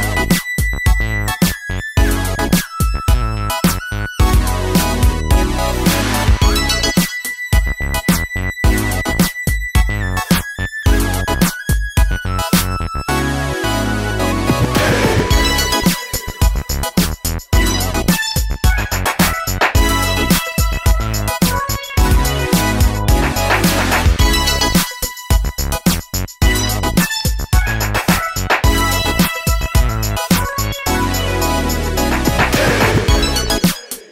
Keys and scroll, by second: 8.5 super+c, 11.3 super+c, 19.3-21.6 typing, 26.8 super+c, 26.9 super+v.